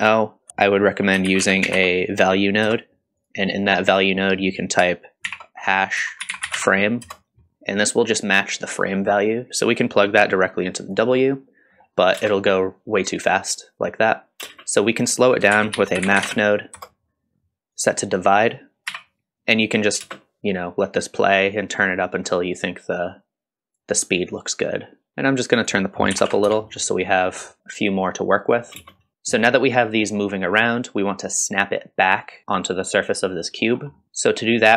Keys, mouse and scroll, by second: 0.5 shift+a, 6.0-9.3 drag, 9.5-10.9 drag, 9.5 space, 11.3-12.2 middle drag, 12.2 space, 14.4 space, 15.2 click, 15.5 shift+a, 18.4-20.0 drag, 20.0 space, 21.2-24.0 drag, 25.1 ctrl+z, 25.1 middle click, 25.1 KP_0, 25.6-27.1 drag, 27.1 middle drag, 27.6-28.5 middle drag, 27.6 space, 28.8 space, 28.9 middle click, 29.1 click, 29.1-29.7 scroll down 2, 33.6 scroll up 2, 33.9 middle click, 34.0 click.